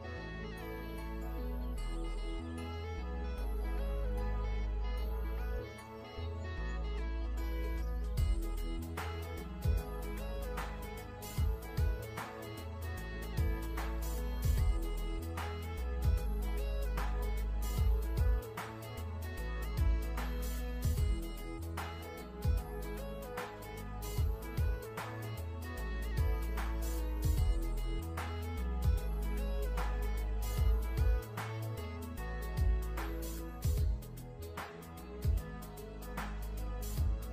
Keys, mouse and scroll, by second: 1.4 click, 2.0-4.0 typing, 2.5 Tab, 5.1 click, 12.0-13.0 scroll down 1, 15.1 click, 16.1 KP_1, 16.3 Tab, 16.4 KP_1, 18.9-20.4 scroll up 1, 20.4 click, 24.6-26.0 scroll up 1, 28.9 click.